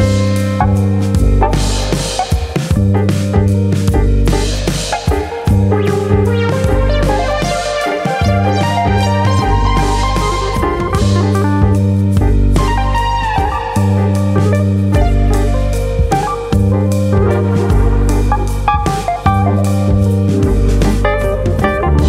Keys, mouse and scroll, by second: 1.2 click, 1.2 middle click, 1.9 shift+e, 2.8 click, 3.9 click, 6.6 KP_Enter, 6.6 click, 7.5 click, 7.8-8.1 scroll down 2, 8.0 middle click, 8.5-9.0 scroll down 2, 8.8 middle click, 9.1-9.6 scroll up 3, 9.6 shift+middle click, 9.9 middle click, 10.2 middle click, 10.3 shift+middle click, 12.8 3, 13.0 click, 13.2 middle click, 14.3 x, 15.8 middle click, 16.9 2, 17.6 alt+click, 18.8 middle click, 19.5 alt+click, 20.3 x.